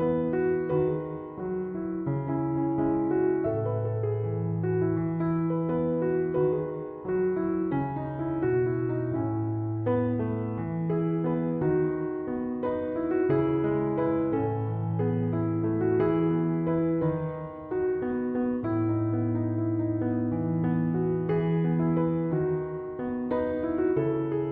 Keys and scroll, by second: 11.5-13.6 typing.